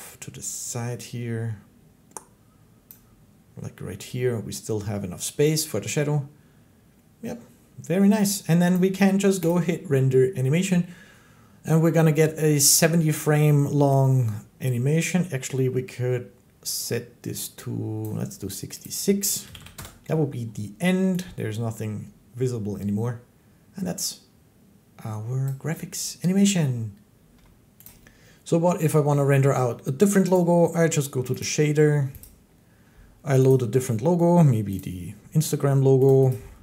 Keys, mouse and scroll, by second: 2.7-7.8 drag, 8.5-14.5 drag, 17.8 click, 18.7 click, 19.3 6, 19.4 6, 19.6 Return, 25.3-27.7 drag, 30.2 click, 31.3 click, 32.1 click, 33.3 click, 34.6 click, 36.0 click.